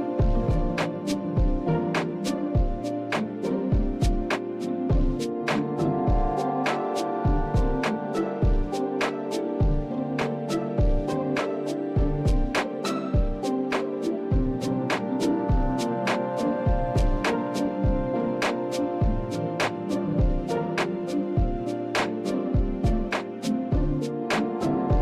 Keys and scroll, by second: 0.6 Left, 1.0 Left, 1.2 Left, 1.4 Left, 2.5 Left, 2.8 Delete, 3.0 Delete, 3.7 Delete, 4.8 Return, 16.3 Up, 20.6 Right, 21.0-22.8 Delete, 22.8 Return.